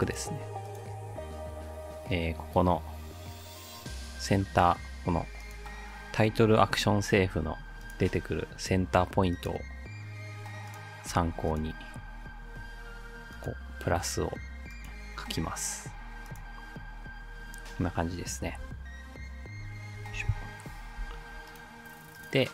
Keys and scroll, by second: 1.1 Delete, 18.5 v, 20.1 BackSpace, 21.0 v.